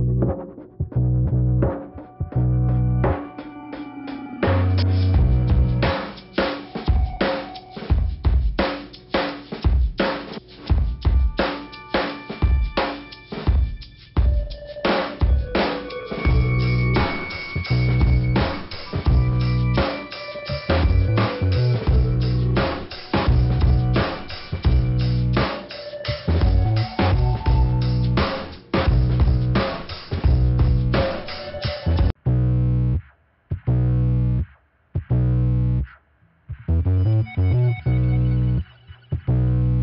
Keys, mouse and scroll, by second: 1.2 middle click, 1.9 click, 3.1 click, 3.2 click, 3.6 click, 4.8 click, 5.0 click, 6.2 click, 6.6 click, 8.7 click, 10.6 right click, 11.8 click, 11.8 right click, 12.0 click, 12.9 click, 13.7 right click, 14.6 click, 15.7 middle click, 16.5 click, 17.8 click, 18.2 click, 19.3 click, 19.7 right click, 20.8 click, 21.4 click, 22.5 click, 23.0 click, 24.2 right click, 25.3 click, 26.4 scroll down 2, 27.3 scroll up 2, 27.9 click, 29.3 click, 29.7 click, 30.9 click, 31.3 right click, 32.4 click, 32.9 scroll down 2, 33.8 click, 34.8 right click, 35.6 click, 35.9 click, 37.7 click, 38.6 click, 39.4 click.